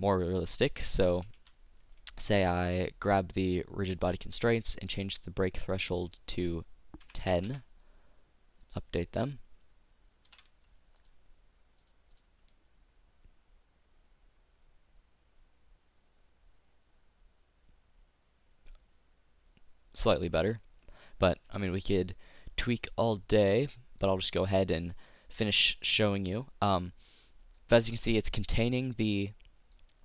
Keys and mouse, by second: 1.4 t, 10.3 t, 11.0-13.8 drag, 20.2-21.9 drag, 24.1 click, 25.0 middle click, 27.6-29.4 drag.